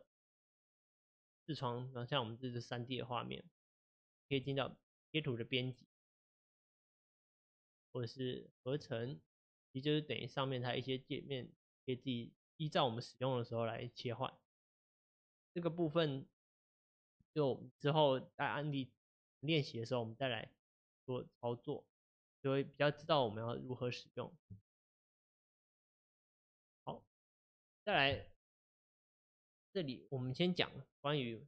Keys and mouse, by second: 4.4-31.4 drag.